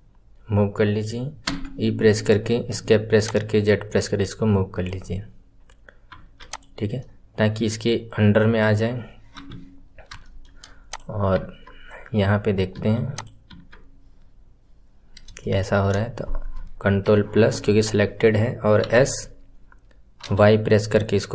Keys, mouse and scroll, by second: 3.1 click, 6.3 click, 6.9-9.3 middle drag, 9.3 KP_3, 10.1-10.8 shift+middle drag, 10.8 click, 13.0 click, 14.9 scroll up 2, 15.3-16.9 shift+middle drag, 16.9 ctrl+KP_Add, 18.7 s.